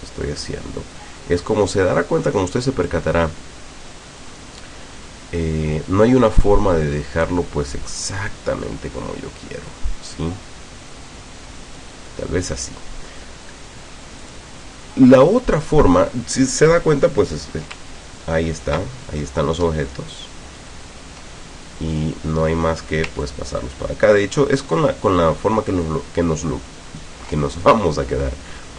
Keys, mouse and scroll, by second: 4.3-12.0 drag, 14.3 click, 19.7-20.4 ctrl+scroll down 4, 23.3-27.2 ctrl+drag.